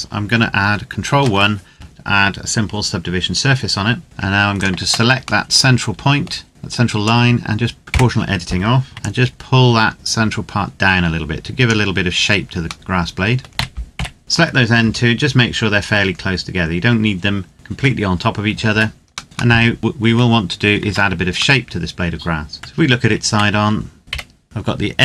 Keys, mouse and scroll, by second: 0.8 ctrl+1, 4.0 alt+Num_Lock, 4.0 scroll up 1, 4.3 alt+right click, 5.3 middle click, 6.7 click, 7.8 o, 8.6 ctrl+z, 8.9 click, 12.7 middle click, 13.5-14.6 typing, 14.2 shift+right click, 17.5 middle click, 17.6 scroll down 1, 18.4 Tab, 19.2 middle click, 19.2 scroll down 1, 19.3 middle click, 20.6 Tab, 21.4 middle click, 22.6 Tab, 23.0 z, 24.0 o.